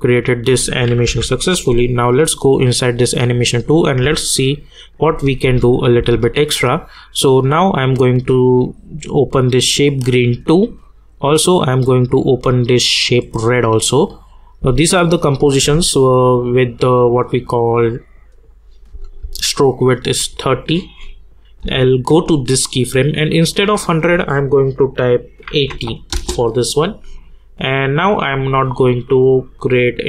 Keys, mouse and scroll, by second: 0.6 click, 1.0 u, 2.2 click, 4.0 space, 7.6 click, 10.0 click, 14.6 space, 16.7 click, 18.9 space, 20.5 click, 21.6 k, 23.7 click, 26.1 Return, 27.1 click.